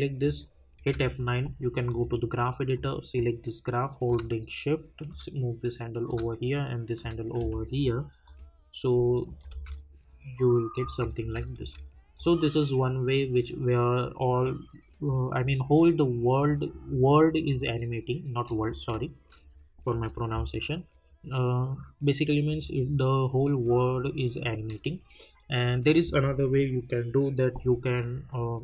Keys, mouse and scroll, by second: 1.3 F9, 1.9-6.1 drag, 5.0-6.1 shift+drag, 7.0-8.2 shift+drag, 9.5 space, 18.5 click, 19.9 k, 22.4 click.